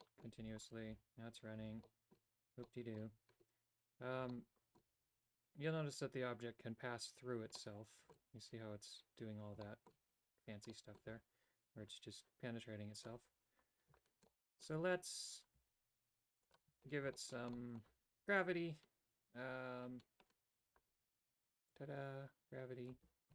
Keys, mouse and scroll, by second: 0.1 middle click, 0.5 a, 0.8 right click, 1.0 g, 1.7 a, 1.9 middle click, 2.8 middle click, 4.4 shift+middle click, 7.7 middle click, 9.7 shift+middle click, 10.8 middle click, 13.1 click, 14.4 middle click, 16.6 alt+right click, 17.2 shift+middle click, 17.7 middle click, 21.8-23.0 drag.